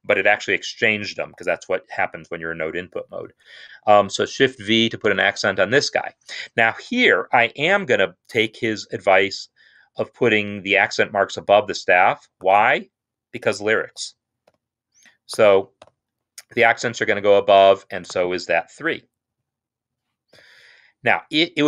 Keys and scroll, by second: 4.9 shift+v, 6.1 Escape, 14.4 typing, 15.9 typing, 20.4 x.